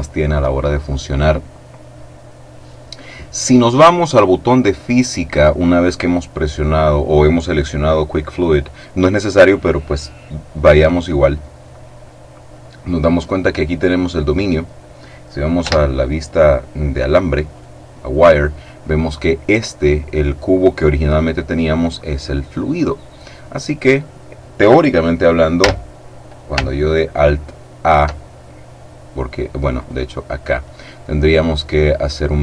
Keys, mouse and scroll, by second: 2.0 middle click, 10.9 click, 15.5 z, 17.5 right click, 25.6 z, 29.7 right click.